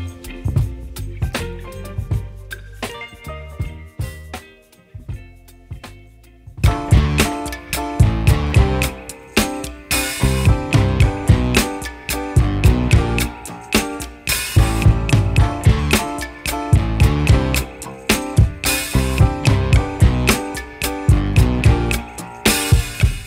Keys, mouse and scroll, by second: 1.1 click, 12.5 right click, 14.2 click, 14.5 scroll down 1, 14.7-15.0 scroll up 1, 15.0 click, 15.3-16.0 scroll up 1, 16.0 click, 16.2 scroll down 1, 17.4 click, 18.5 ctrl+z, 18.8-19.2 scroll up 1, 19.2 click, 19.5-19.9 scroll up 1, 20.2 ctrl+shift+click, 20.7-21.3 scroll down 1, 21.5 scroll up 1, 21.7 right click, 22.2-22.8 scroll up 1.